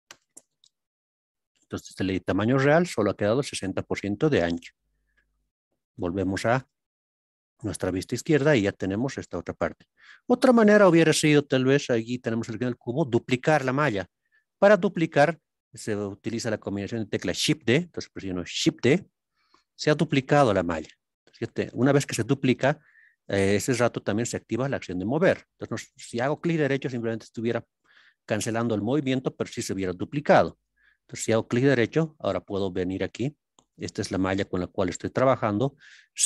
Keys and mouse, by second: 0.1 KP_Enter, 5.9 KP_3, 6.5 ctrl+KP_3, 18.9 shift+d, 32.1-33.1 middle drag, 34.7 click.